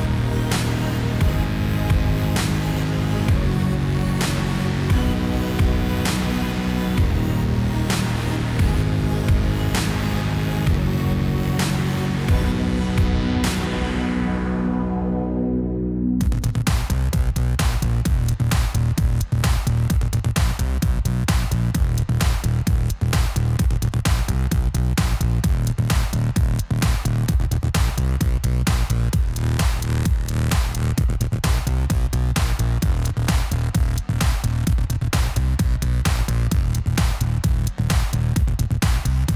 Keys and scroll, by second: 12.0 Tab, 23.5 ctrl+r, 29.7 alt+a.